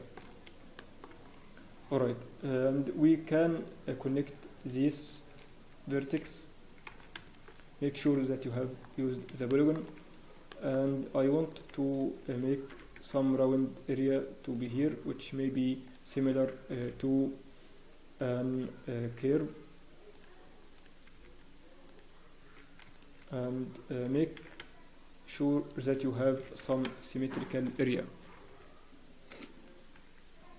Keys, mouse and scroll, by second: 0.2-0.5 scroll up 1, 0.7-1.2 shift+scroll, 0.7 shift+middle click, 1.1 scroll up 5, 5.3 shift+click, 6.1 f, 6.9 ctrl+z, 7.2 shift+click, 8.0 f, 8.5 scroll down 1, 8.7 scroll up 1, 9.5 shift+click, 10.5 shift+click, 11.5 click, 11.5 scroll down 2, 11.9 shift+click, 12.7 scroll up 2, 12.7 g, 18.5 click, 19.0 g, 20.7 click, 21.0 g, 22.9 shift+click, 24.0 g.